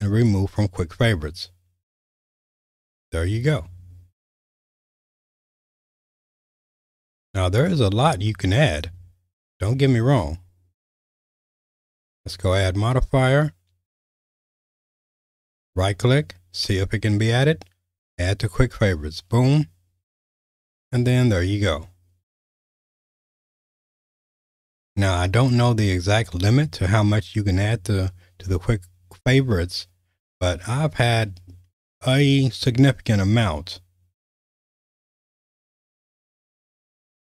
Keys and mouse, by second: 6.6-7.7 drag, 8.8 click, 10.9-19.8 drag, 20.7 q.